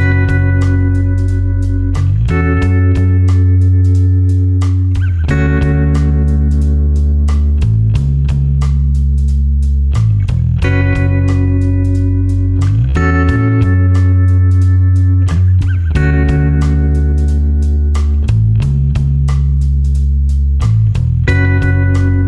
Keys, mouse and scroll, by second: 2.4 click, 14.9 click, 15.9 shift+x, 18.3 d, 19.4-20.1 typing, 21.6 click.